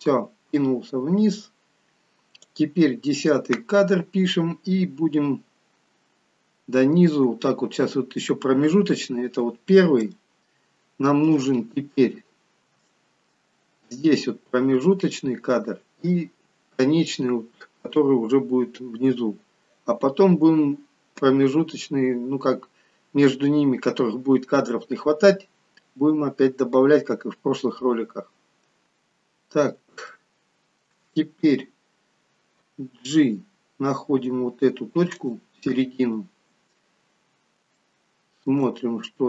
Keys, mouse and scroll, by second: 4.1-4.6 scroll down 1, 5.9-6.8 scroll down 1, 6.8-8.2 scroll down 5, 10.1 shift+middle click, 11.5-12.1 scroll up 5, 12.4 scroll down 1, 12.9 shift+middle click, 22.6-23.2 scroll down 2, 29.4-29.9 scroll up 1, 30.2 shift+middle click, 33.1 g, 36.0-37.1 scroll up 7, 37.8 shift+middle click, 39.0-39.2 scroll down 2.